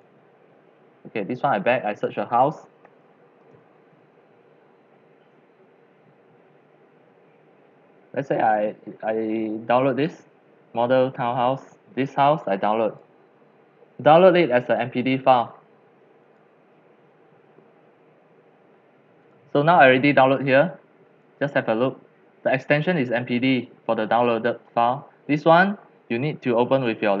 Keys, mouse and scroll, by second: 1.7-2.6 drag, 2.4-3.5 typing, 10.2-13.3 drag, 13.6 drag, 13.8-14.5 drag, 14.7 click, 14.8-15.1 drag, 15.5-16.2 drag, 16.5-18.7 drag, 19.2 click, 20.6 click, 24.3 click, 24.5-27.2 drag.